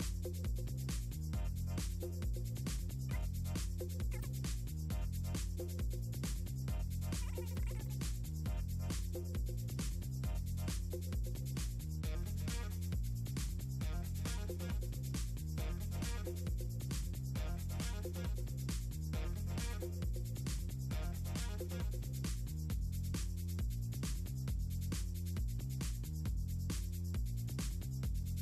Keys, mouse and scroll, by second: 2.4 2, 4.9 Delete, 5.0 click, 5.3 3, 5.8 click, 6.1 Delete, 7.2 scroll down 2, 7.4 click, 7.6 click, 8.3 click, 8.8 scroll up 2, 9.1 click, 9.4 scroll up 2, 10.0 click, 10.4 scroll down 2, 11.6 click, 14.1 scroll down 2, 15.4 click, 15.9 click, 16.6 click, 16.8 click, 17.2 ctrl+c, 17.4 click, 17.9 scroll down 2, 18.2 click, 18.6 ctrl+c, 19.2 click, 20.7 click, 21.3 click, 21.5 click, 22.3 click, 22.6 click, 24.6 click, 25.2 super+v, 26.6 super+v, 26.9 click, 28.1 click.